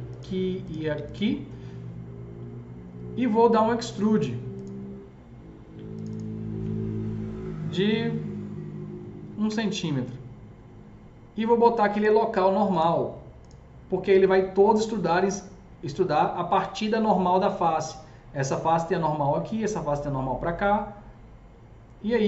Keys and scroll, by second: 9.3 KP_1, 9.4 Return.